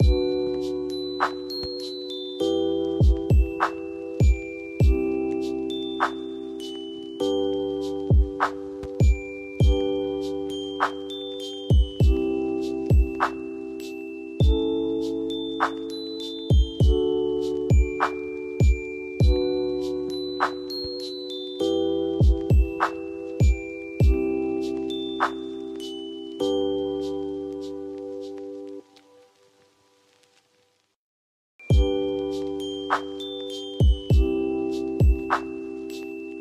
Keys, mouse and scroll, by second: 0.8 click, 2.8 shift+click, 4.0 b, 4.8 click, 4.8 click, 7.8 F2, 8.2-11.6 drag, 11.6 ctrl+x, 13.8 ctrl+z, 14.6 F4, 15.5-17.9 drag, 17.9 scroll down 1, 19.2 click, 23.2-26.8 drag, 26.8 shift+Page_Up, 27.7-31.6 drag, 31.9 F2, 32.3 click.